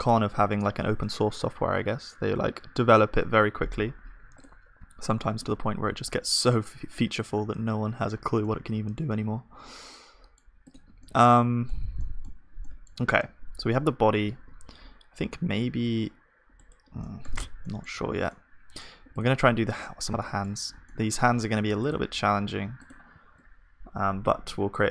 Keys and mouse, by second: 0.6-3.8 right drag, 5.0 Tab, 6.1 click, 6.1 right click, 13.0 Tab, 14.4 ctrl+r, 17.0-20.6 middle drag, 17.4 Tab, 18.0 ctrl+s, 20.6 click, 21.2-23.2 middle drag, 23.2-24.9 drag.